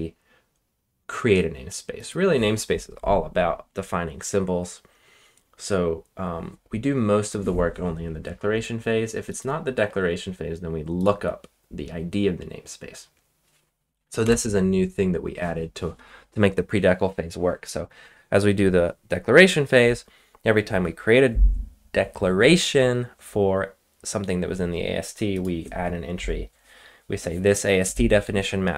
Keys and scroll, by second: 14.2 Return.